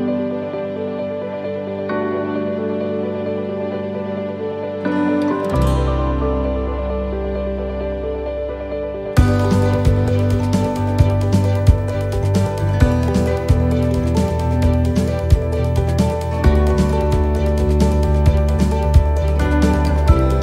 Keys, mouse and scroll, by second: 0.2 scroll down 1, 1.6 click, 3.9 right click, 5.3 shift+d, 7.2 click, 11.8 middle click, 12.5 shift+middle click, 12.6 shift+middle click, 12.8 scroll up 5, 13.4 middle click, 14.2 shift+middle click, 15.0 middle click, 17.2 middle click, 17.7 shift+middle click, 17.7 shift+middle click, 18.3 middle click, 19.6 click.